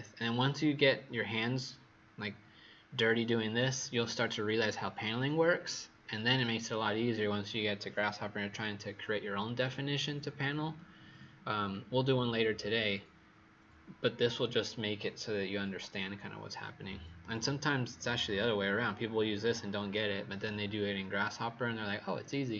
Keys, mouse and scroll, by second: 0.8 scroll down 1, 18.0-22.4 scroll down 3.